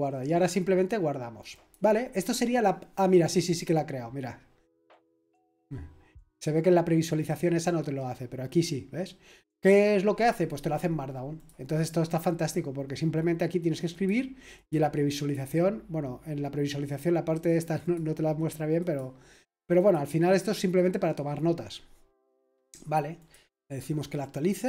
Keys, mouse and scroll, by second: 0.0-0.5 scroll down 2, 1.5 click, 11.3 click, 13.9 click, 14.5 click, 14.8 click, 15.1 click, 17.8 click, 18.8 click, 19.7 click, 22.4 click, 23.2 click.